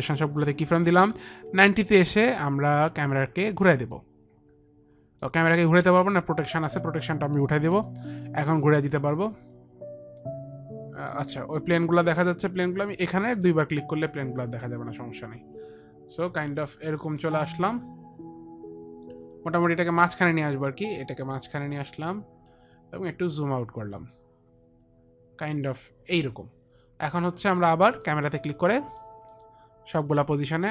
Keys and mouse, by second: 2.0 click, 4.5 click, 6.1 click, 6.7 click, 8.1 Delete, 8.1 click, 8.6 Delete, 8.6 click, 9.3 click, 12.3 click, 13.3 click, 13.4 click, 13.7 click, 15.8 click, 21.1 click, 23.5 click, 25.3 click, 29.4 click.